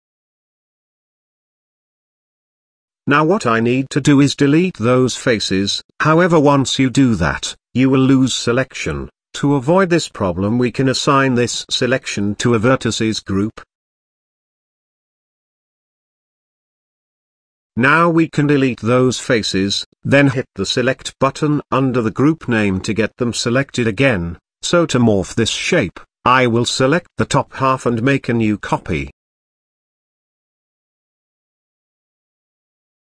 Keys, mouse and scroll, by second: 0.4-1.0 scroll down 2, 1.0 middle click, 1.5-2.0 scroll up 2, 2.9-3.3 shift+middle drag, 3.3 z, 5.8 x, 9.9 ctrl+z, 11.7 click, 13.0-14.9 drag, 16.0-17.1 drag, 17.1-17.6 scroll down 1, 17.6-18.1 shift+middle drag, 18.1-18.6 scroll up 1, 18.6 x, 21.2-22.7 drag, 22.7-23.0 scroll down 2, 23.0 z, 23.5-24.6 middle drag, 24.6-25.6 scroll up 3, 25.6-25.9 scroll down 4, 26.5 Tab, 26.8-27.2 scroll down 2, 27.2-29.3 middle drag, 29.3 shift+d, 31.7-32.5 shift+middle drag, 32.5-33.0 scroll up 7.